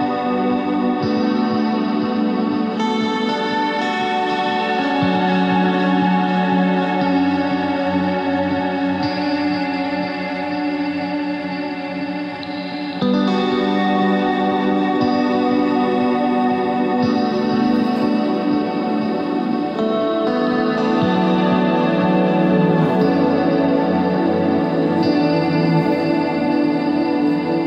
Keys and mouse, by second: 3.4 click, 3.6 middle click, 7.0-9.1 middle drag, 9.5-16.4 drag, 17.3 click, 18.6 KP_1, 18.9 ctrl+Tab, 19.4 z, 19.9 c, 23.6 middle click, 24.2-25.9 drag, 26.2 click, 26.8 z.